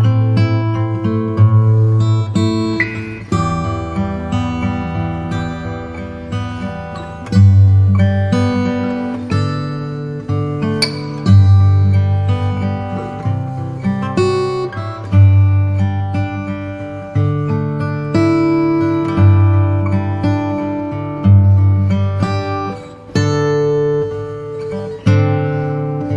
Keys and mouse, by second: 3.4 KP_7, 7.0-10.3 right drag, 11.7 KP_1, 17.0 g, 21.6 middle click, 23.8-25.7 drag.